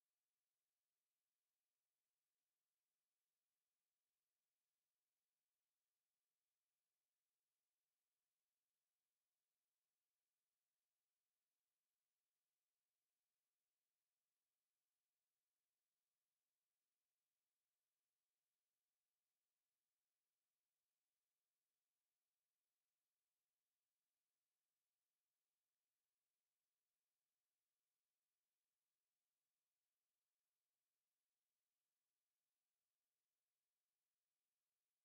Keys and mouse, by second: 2.3 alt+click, 4.5 click, 5.5 alt+click, 5.8 alt+right click, 7.2 r, 8.9 click, 10.0 alt+click, 11.5 ctrl+z, 12.5 click, 13.3 alt+click, 16.1 click, 18.0 ctrl+z, 18.3 ctrl+z, 18.8 alt+click, 20.4 click, 22.0 alt+click, 23.9 ctrl+z, 24.6 alt+click, 25.8 alt+click, 26.1 alt+right click, 32.8 alt+click, 33.5 alt+right click, 33.9 alt+click, 34.8 click.